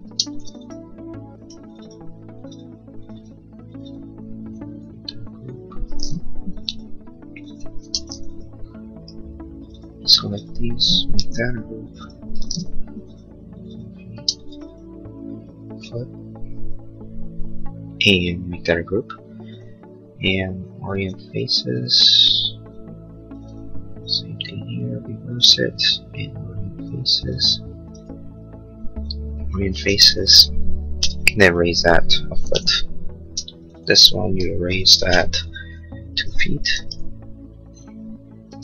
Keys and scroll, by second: 0.0 space, 6.3 p, 7.8 space, 11.1 g, 12.7 p, 14.1 space, 29.7 space, 29.9 Escape, 30.9 m, 32.2 1, 32.4 Return, 34.3 Escape, 35.0 m, 36.9 Return, 38.4 space.